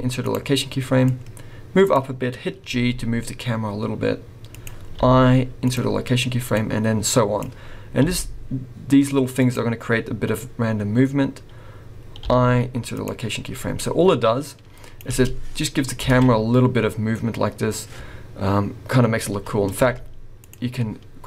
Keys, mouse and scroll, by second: 1.0 click, 2.7 g, 5.0 i, 6.5 click, 8.0 g, 12.2 i, 13.8 click, 15.1 space, 16.1 alt+a, 16.2 scroll up 2, 19.8 space, 20.4 click.